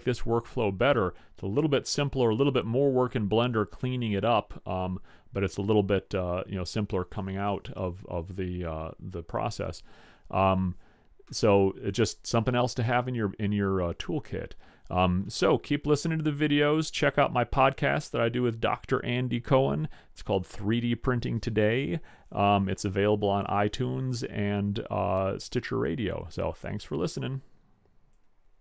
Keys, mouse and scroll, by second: 11.4-13.4 middle drag.